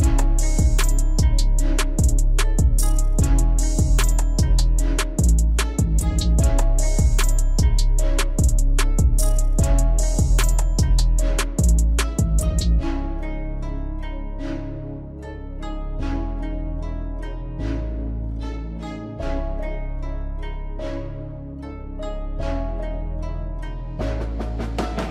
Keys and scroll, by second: 23.0 ctrl+a.